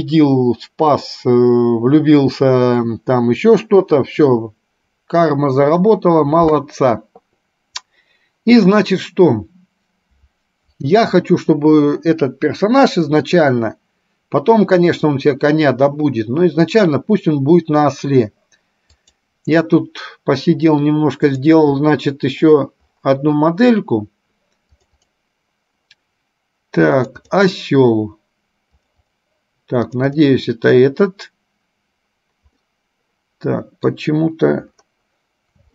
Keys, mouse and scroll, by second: 16.8-19.6 drag, 33.0-34.1 middle drag.